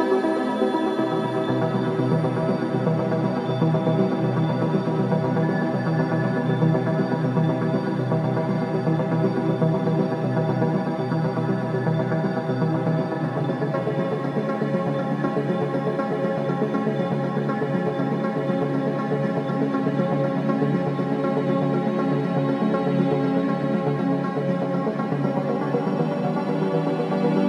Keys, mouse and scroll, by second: 0.3-1.0 scroll up 1, 1.0 click, 1.3 scroll down 1, 2.7 scroll up 1, 5.2 click, 7.7-8.1 scroll up 1, 8.6 scroll up 1, 9.7 click, 11.1-12.0 typing, 13.4 Return, 14.1 scroll up 1, 14.7 click, 16.3 right click, 17.5 click, 17.9 scroll down 1, 18.9 click, 19.2 scroll down 1, 20.5-26.9 drag, 27.3-27.4 scroll down 1.